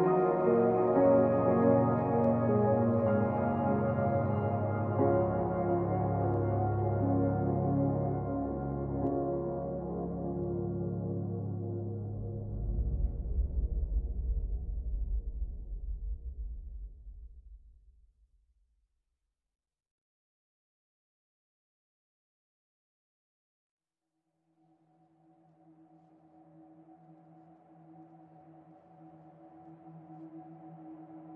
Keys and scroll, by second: 4.9 Up, 8.1 ctrl+s.